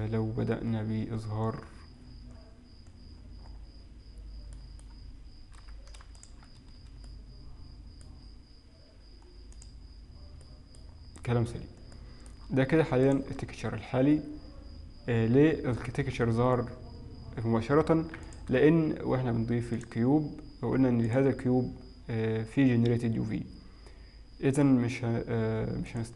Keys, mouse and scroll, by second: 1.6-2.5 scroll down 11, 3.0-3.5 scroll down 3, 3.2-6.0 scroll up 8, 6.0 middle click, 6.2 ctrl+shift+click, 7.1 middle click, 9.6 click, 10.9 middle click, 11.1-11.6 scroll up 2, 11.6-12.2 scroll down 1, 12.2 middle click, 12.2 scroll down 2, 13.2 ctrl+shift+click, 18.2 x, 18.7 shift+a, 21.1 click, 26.0 click.